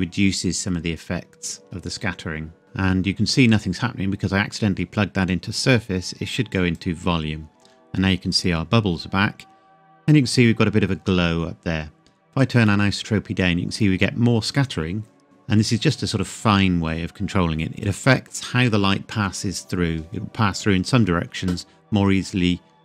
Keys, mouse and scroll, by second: 2.6 click, 8.8 scroll up 1, 12.4 click.